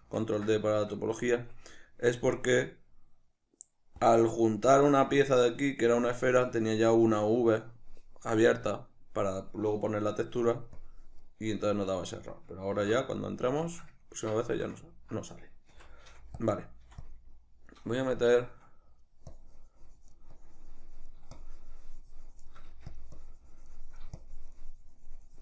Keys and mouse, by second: 0.0 ctrl+d, 1.4 Escape, 2.3 click, 4.1-10.9 drag, 11.5-16.5 middle drag, 13.1 ctrl+d, 15.7 c, 16.5 click, 16.9 f, 17.1 click, 17.3-19.3 middle drag, 19.3-23.0 drag, 22.7 f, 23.2-25.4 drag.